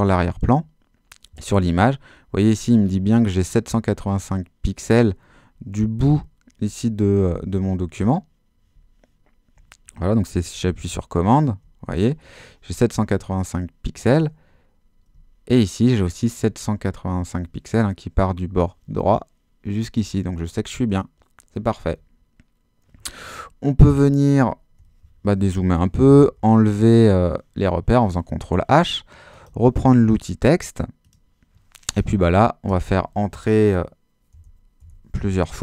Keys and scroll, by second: 24.3 super+-, 26.3 super+h, 32.7 Return, 34.4 Return.